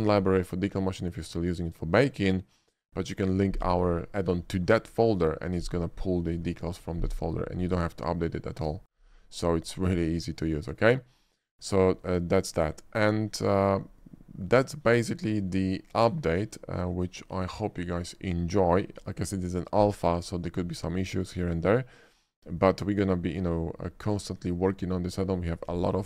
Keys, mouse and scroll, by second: 0.3 typing, 10.7 shift+middle click, 11.6 shift+middle click, 12.1-12.7 shift+middle drag, 21.2-21.9 middle drag, 22.2 shift+middle drag, 22.6 shift+middle click, 23.2 shift+middle click, 24.1-25.2 shift+middle drag.